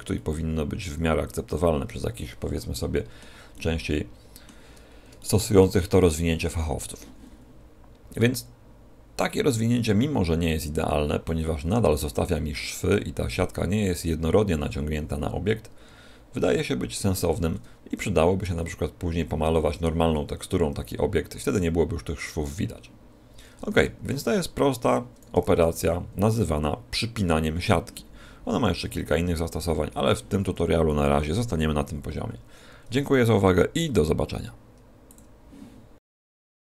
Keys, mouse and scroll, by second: 0.1 middle click, 3.5 middle click, 11.1 middle click, 16.9 Tab, 23.6 Tab, 25.3 Tab, 25.7 a.